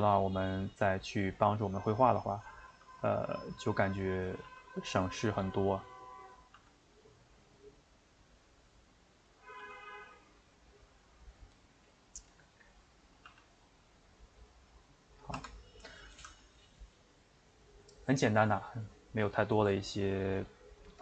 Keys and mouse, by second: 2.6-3.6 middle drag, 3.6 click, 4.1 click, 4.5 g, 6.3 click, 6.5 g, 8.4 middle click, 9.3 click, 9.6 g, 10.9-13.3 middle drag, 13.3 g, 15.4 Tab, 15.8-21.0 middle drag.